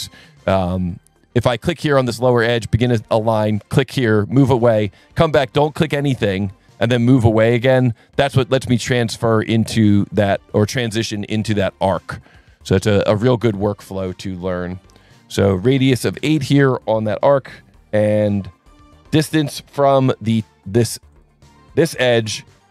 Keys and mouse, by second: 0.2 s, 0.9 click, 2.0 click, 3.6 click, 7.9 click, 9.7 click, 10.7 click, 11.8 s, 12.9 click, 14.9 click, 15.5 click, 16.1 KP_8, 16.3 KP_Enter, 21.1 click.